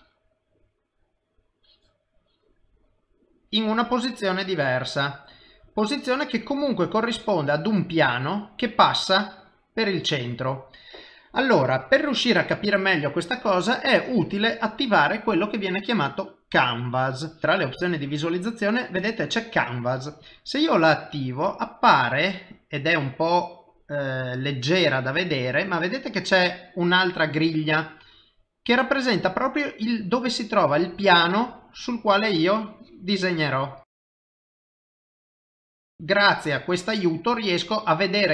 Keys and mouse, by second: 0.4 click, 0.4 middle click, 1.6 click, 2.2 click, 2.7 middle click, 3.4 click, 4.0 click, 4.5 middle click, 6.7 middle click, 9.8 middle click, 14.3 click, 17.5 click, 21.8 middle click, 25.1 middle click, 26.1 middle click, 29.0 middle click, 32.1 click, 32.8 click, 33.3 middle click, 33.9 click, 34.4 click, 34.8 click, 35.0 middle click, 35.7 click, 36.0 click, 36.4 middle click, 37.3 middle click, 38.2 click.